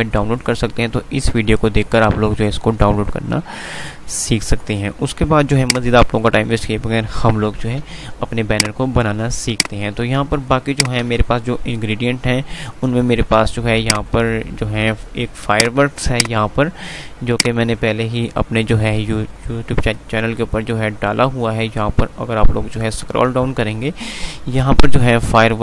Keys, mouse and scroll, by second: 5.3 F5, 5.5 click, 7.5 F3, 8.9 click, 9.1 F2, 9.6 click, 10.6 F2, 10.9 click, 11.1 F3, 13.5 F2, 15.6 click, 21.0 scroll down 1, 22.3 scroll down 1.